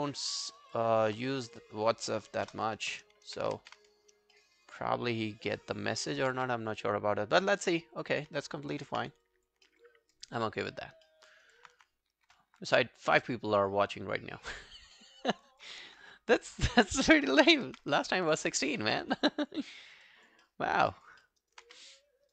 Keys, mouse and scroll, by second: 0.2 alt+scroll down 2, 0.4 alt+middle click, 0.8 alt+click, 1.5 double click, 2.5 ctrl+BackSpace, 4.1-4.6 alt+scroll down 2, 4.4 alt+middle click, 4.6 alt+right click, 4.8 alt+click, 6.4 alt+click, 6.9 right click, 8.7 ctrl+i, 9.0 ctrl+scroll down 2, 9.3 alt+click, 9.7 alt+middle click, 9.9 alt+scroll down 1, 10.2 alt+click, 10.5 alt+middle click, 10.7 alt+scroll down 1, 10.8 alt+scroll up 2, 11.1 alt+middle click, 11.3 alt+scroll down 1, 11.3 alt+right click, 11.6 alt+click, 15.0 alt+middle click, 15.2 alt+right click, 15.5 alt+click, 17.5 ctrl+i, 17.9-18.3 ctrl+scroll down 1, 18.3 alt+click, 18.8 alt+middle click, 19.0 alt+right click, 19.3 alt+click, 19.7 alt+middle click, 19.9 alt+right click, 20.1 alt+click, 20.4 alt+middle click, 20.7 alt+right click, 20.9 alt+click, 21.2 alt+middle click, 21.4 alt+right click, 21.7 q, 21.8 right click.